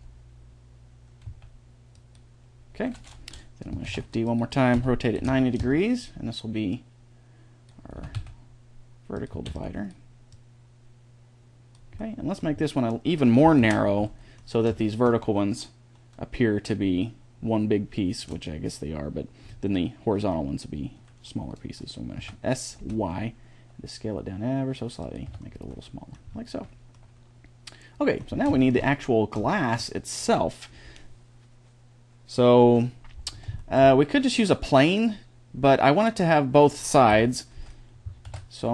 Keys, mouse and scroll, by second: 3.7 shift+d, 4.6 r, 6.6-8.4 drag, 7.8 s, 9.2 a, 9.3 b, 10.1-12.0 drag, 12.0 middle click, 13.4 ctrl+l, 19.3-22.0 middle drag, 22.0 s, 25.1 Tab, 28.5 middle drag, 29.2-36.4 middle drag, 36.9 KP_1, 38.1 shift+a.